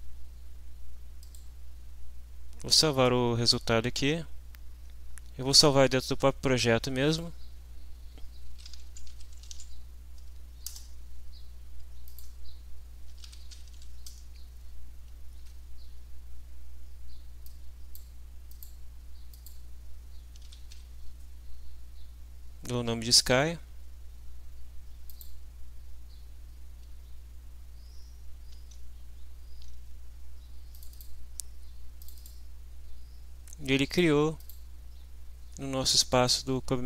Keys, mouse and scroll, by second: 1.2 click, 7.1 click, 8.3-10.0 typing, 10.7 Return, 12.1 click, 12.8-14.2 typing, 15.5 Return, 17.5 click, 18.5 click, 19.3 click, 20.1-21.2 typing, 25.1 click, 28.6 alt+Tab, 29.5 alt+Tab, 30.7 click, 32.0 click, 33.9 click, 34.4 click.